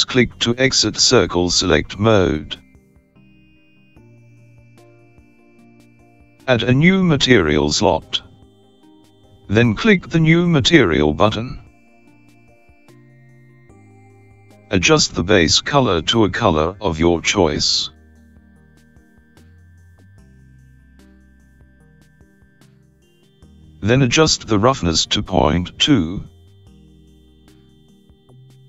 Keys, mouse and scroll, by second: 6.3 scroll up 4, 7.7-8.8 scroll up 4, 9.7 click, 12.5 click, 15.0 click, 23.1-24.3 scroll down 3, 24.3-24.8 scroll down 3, 26.2-27.1 scroll down 1, 27.1 click.